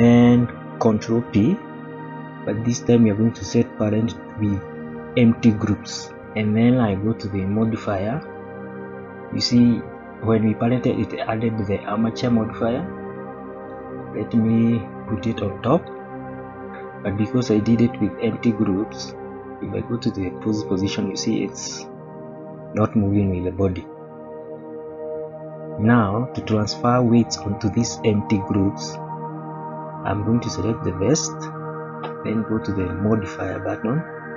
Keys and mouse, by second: 1.2 ctrl+p, 7.5 click, 13.2 click, 14.0-15.9 drag, 20.3 click, 24.2 click, 25.5-25.8 shift+middle drag, 26.7-27.0 middle drag, 30.4 click, 32.7 click, 34.2-34.3 shift+middle drag.